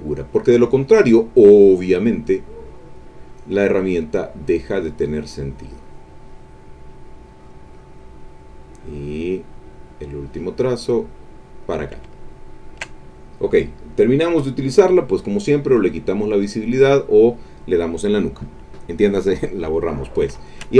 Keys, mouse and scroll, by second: 4.8-7.5 drag, 9.4-11.8 drag, 12.2 ctrl+middle click, 14.6 click, 15.6 click, 16.6 click, 20.0 ctrl+middle click.